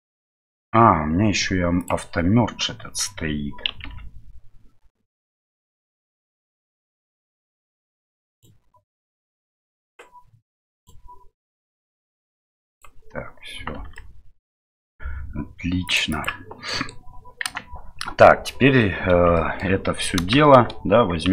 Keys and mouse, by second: 1.8 click, 4.1 ctrl+z, 6.0 middle click, 8.3 right click, 9.2 click, 10.8 right click, 11.6-13.2 drag, 13.9 Tab, 13.9-14.7 middle drag, 15.9 click, 16.1 click, 16.6 middle drag, 17.4 KP_1, 19.3 middle drag, 20.4 shift+z.